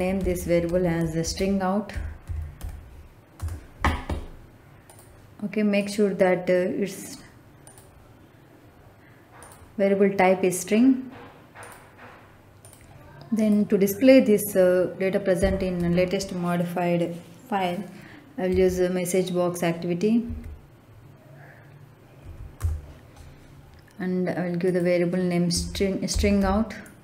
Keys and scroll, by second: 0.0-2.5 typing, 3.2 Return, 15.3 m, 15.7 e, 18.4 s, 20.2 s, 22.1 Down, 22.5 Return, 25.4 s, 26.0 t, 26.3 r.